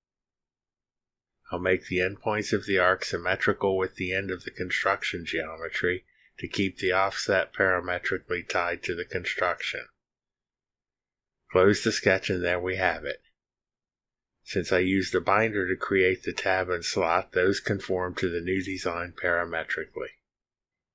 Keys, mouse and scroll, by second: 0.0 click, 5.2 click, 6.2 ctrl+click, 7.0 ctrl+click, 8.7 click, 11.2 click, 12.6-18.4 drag, 19.0 click, 19.2 space, 19.7-20.8 drag.